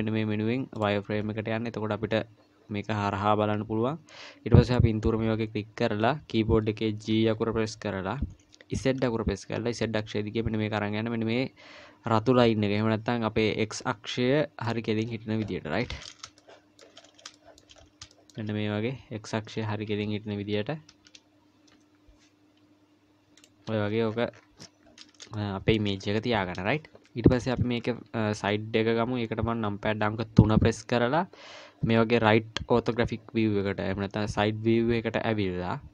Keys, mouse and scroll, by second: 1.2-1.7 scroll up 3, 1.7 :, 2.0-4.2 scroll up 1, 4.2-5.0 scroll down 3, 4.7 click, 5.1-7.1 scroll up 4, 7.1 g, 15.3-16.2 scroll up 2, 16.2 scroll up 1, 16.4 shift+middle click, 17.0-18.1 scroll up 5, 17.4 shift+middle click, 18.1 shift+middle click, 20.3 g, 23.8-24.9 scroll down 16, 25.2 scroll down 2, 25.3 shift+middle click, 26.0-27.3 scroll down 1, 27.3 middle click, 27.3-27.7 scroll down 1, 30.4 KP_3.